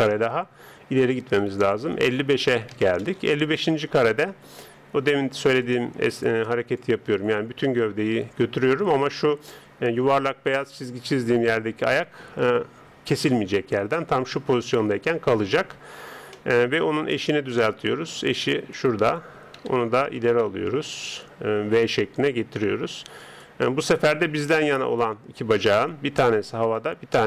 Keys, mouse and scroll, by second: 0.1-1.9 middle drag, 1.6 click, 2.7 KP_5, 5.7-8.5 drag, 16.3-18.7 middle drag, 18.7 right click, 19.6 KP_3, 21.0 g, 24.7 right click.